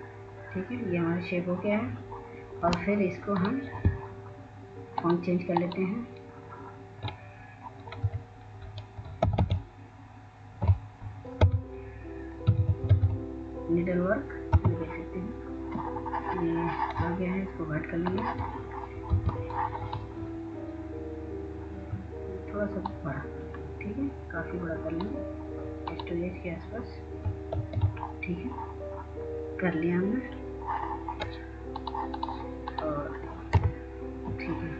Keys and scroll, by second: 0.6 typing, 10.1-11.0 typing, 12.3-14.1 typing, 15.6 Return, 20.2 F2, 28.7 x.